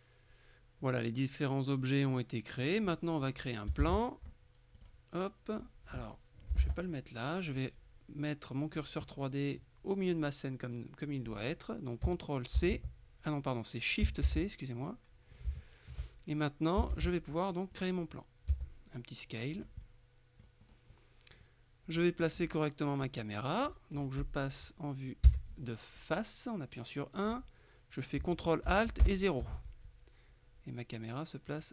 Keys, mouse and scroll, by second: 1.1-3.2 middle drag, 3.9 shift+a, 4.8 click, 6.6 Delete, 6.7 Return, 12.7 ctrl+c, 14.3 shift+c, 14.9-15.9 shift+middle drag, 17.0 shift+a, 17.8 click, 18.6 s, 19.6 click, 21.5-22.8 middle drag, 25.3 KP_1, 29.1 ctrl+alt+KP_0, 31.6 right click.